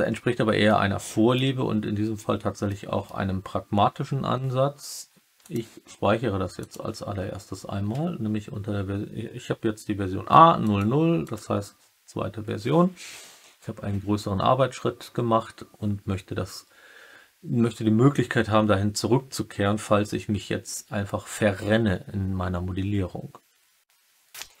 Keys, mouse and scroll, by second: 0.6 alt+middle click, 0.7 alt+click, 2.6 alt+middle click, 2.7 alt+click, 2.8 alt+middle click, 3.0 alt+click, 5.5-6.7 drag.